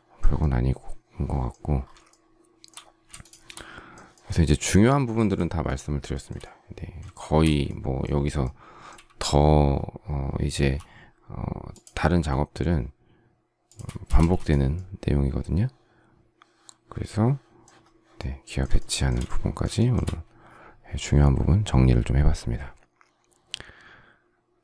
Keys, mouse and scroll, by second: 2.0 shift+middle click, 3.2 shift+click, 5.2 shift+click, 5.6 shift+click, 5.7 shift+double click, 6.0 shift+middle click, 7.1 shift+middle click, 10.5 m, 13.6 shift+click, 14.1 space, 18.7 shift+middle click, 19.7 shift+middle click.